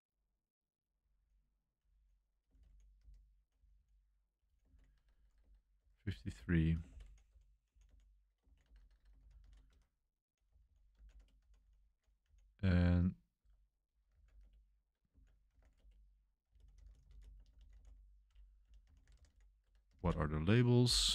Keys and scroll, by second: 0.0-7.4 typing, 8.4-11.9 typing, 13.1-20.5 typing.